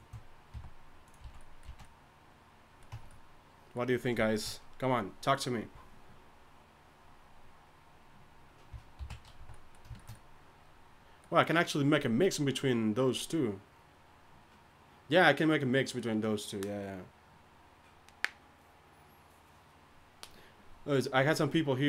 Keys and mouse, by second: 0.5 g, 1.2 3, 1.6 z, 2.9 Tab, 9.0 alt+h, 9.4 a.